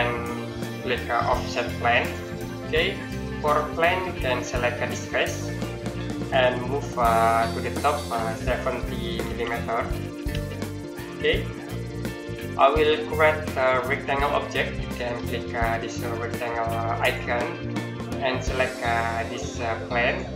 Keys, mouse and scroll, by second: 1.8 click, 5.3 click, 8.7 KP_7, 9.1 KP_0, 10.1 KP_Enter, 11.0 scroll down 1, 11.4-12.8 scroll up 1, 12.8 middle click, 16.8 click, 20.2 click.